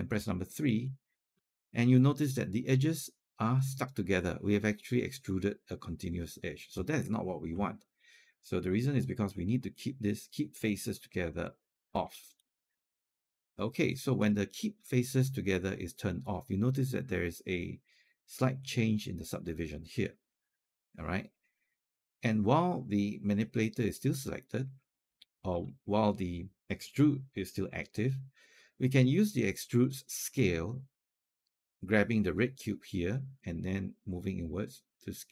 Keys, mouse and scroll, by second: 0.5 3, 11.2-13.5 drag, 20.1-24.5 alt+drag, 24.6 alt+click, 33.2 click.